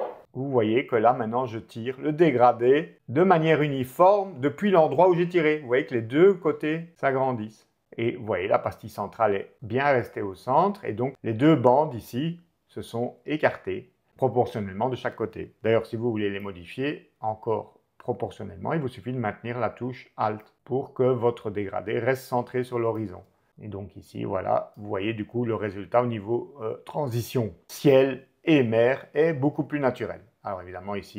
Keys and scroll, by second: 20.5 alt+super+z.